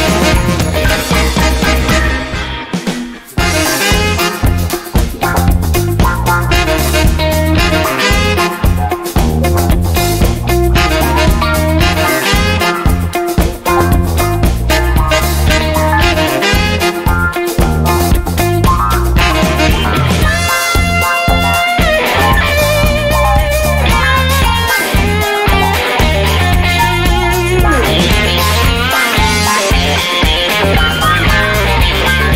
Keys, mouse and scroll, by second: 0.3 BackSpace, 1.5 click, 3.3 0, 4.8 click, 5.9 0, 6.5 click, 6.9 1, 7.6 click, 8.2 click, 9.9 click, 11.5 click, 14.9 click, 15.5 click, 16.8 click, 20.0 click, 21.1 click, 23.4 click, 24.5 click, 27.0 click, 30.9 click.